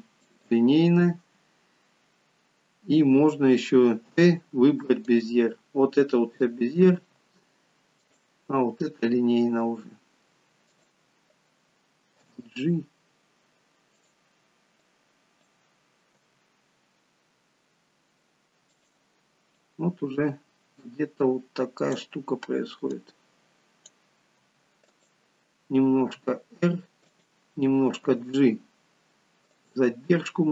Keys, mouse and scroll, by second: 7.1 t, 9.1-9.6 scroll up 3, 9.6-10.3 scroll down 1, 10.7 click, 12.2 g, 14.8 click, 16.3 g, 19.7 click, 22.9 click, 24.4 g, 26.1 r, 28.1 g.